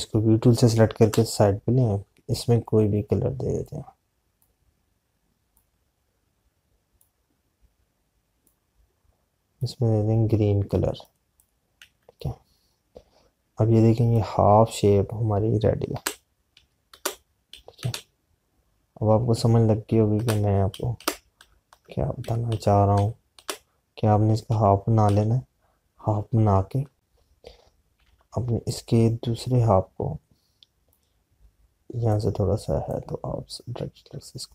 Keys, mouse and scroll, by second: 0.1 click, 3.6 Left, 4.5 click, 16.9 Right, 28.9 z, 29.7 click.